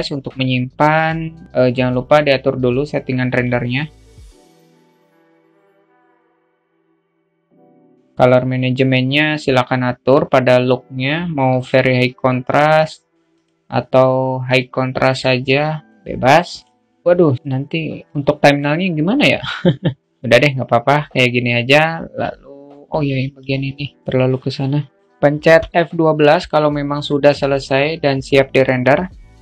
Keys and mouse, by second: 2.3-3.9 drag, 4.5-5.5 drag, 6.0-6.6 drag, 7.2 click, 10.0-11.5 drag, 14.3 click, 15.6-22.9 drag.